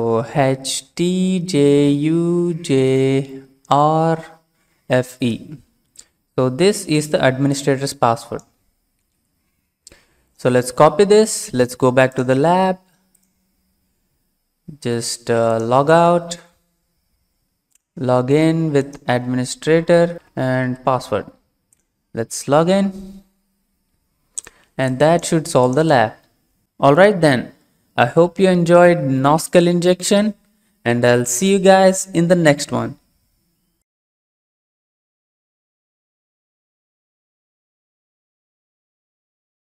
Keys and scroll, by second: 0.4-3.6 typing, 4.7 typing, 9.0 ctrl+c, 19.6-20.5 typing, 20.7 ctrl+v.